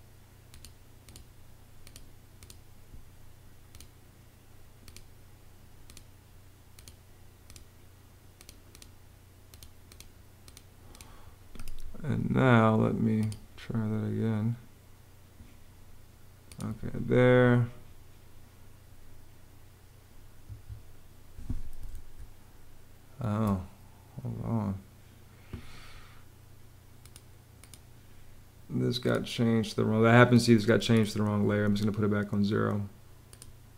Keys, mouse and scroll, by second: 20.1 Escape, 21.6 super+z.